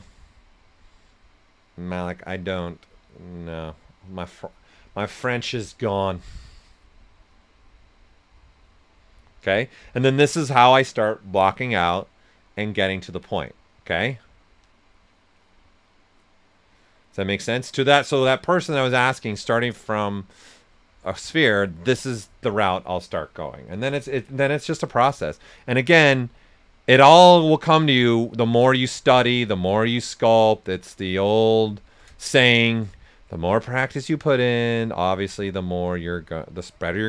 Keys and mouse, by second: 23.4-25.1 typing, 24.7 click, 25.8 right click, 27.9 click, 30.2-33.1 shift+drag, 33.1 right click, 34.1 click, 35.7 s, 35.8 click.